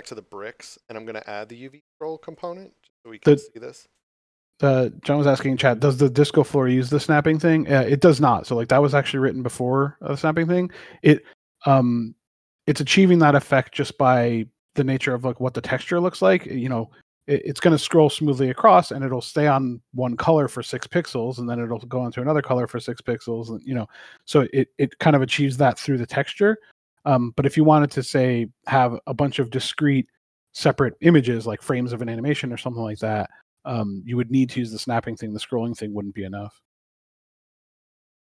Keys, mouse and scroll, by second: 1.2 click, 5.6 click, 7.3 Return, 14.5 scroll down 1, 31.1 click, 32.4 s, 35.8 click.